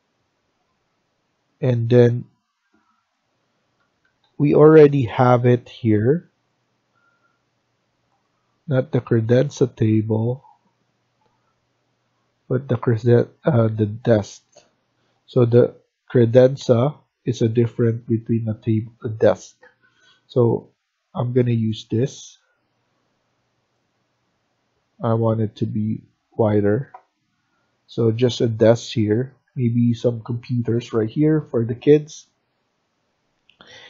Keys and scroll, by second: 3.7 Escape, 3.9 Escape, 4.1 Escape, 28.6 Escape, 28.9 Escape, 29.2 Escape.